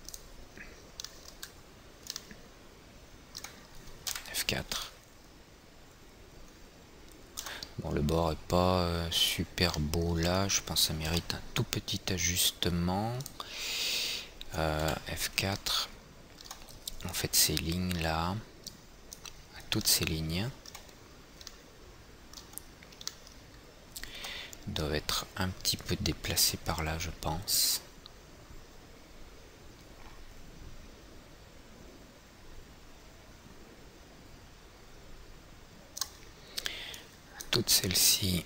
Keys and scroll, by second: 4.7 F4, 15.3 F4, 24.7 w.